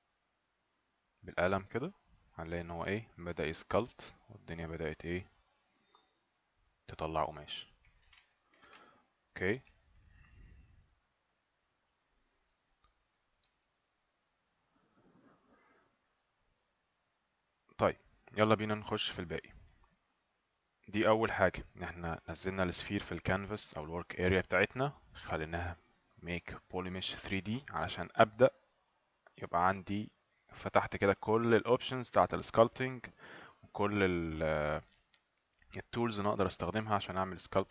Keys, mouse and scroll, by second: 2.1 right click, 5.4 alt+click, 7.0 right click, 8.0 ctrl+z, 8.6 ctrl+z, 9.8 alt+right click, 10.8 right click, 12.7 alt+right click, 13.6 right click.